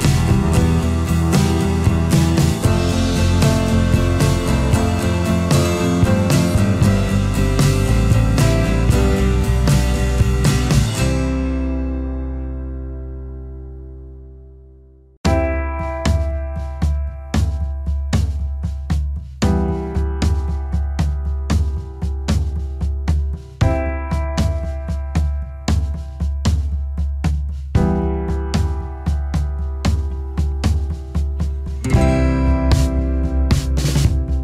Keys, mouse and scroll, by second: 0.9-2.1 alt+scroll down 1, 2.2 ctrl+z, 5.2 alt+scroll up 1, 17.1 alt+scroll down 1, 17.4 space, 18.0 alt+scroll up 1, 18.2 space, 21.4 space, 23.4 space, 24.1 alt+scroll up 1, 26.4 alt+scroll up 1, 28.0 space, 31.9 space.